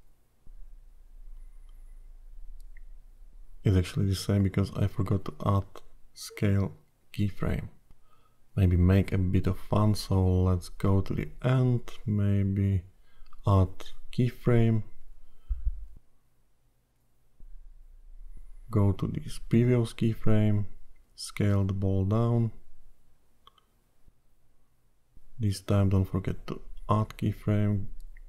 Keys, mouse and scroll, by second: 11.5 s, 15.9 i, 18.7 click, 22.8 click, 24.6 s.